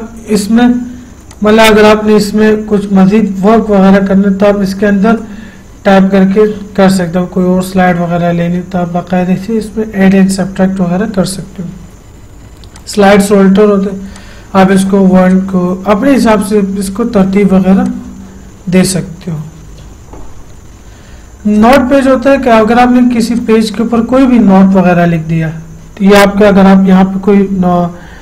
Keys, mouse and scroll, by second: 1.6 click, 5.5 Return, 8.8 Page_Down, 13.0-21.9 drag.